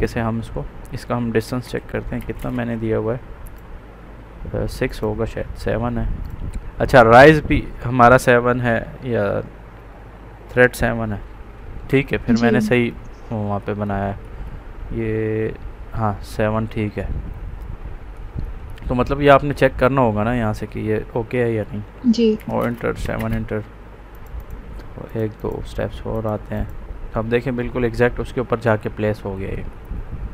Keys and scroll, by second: 1.1-2.1 typing, 22.5 space.